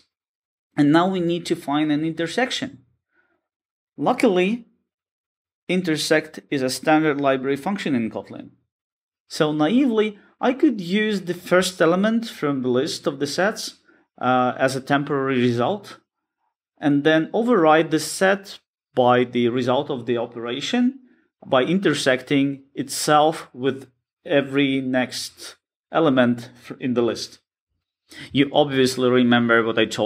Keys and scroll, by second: 1.5 Return, 13.3 Return, 15.5 Tab, 17.8 Return, 20.5 Return, 22.8 Return, 23.5 Return.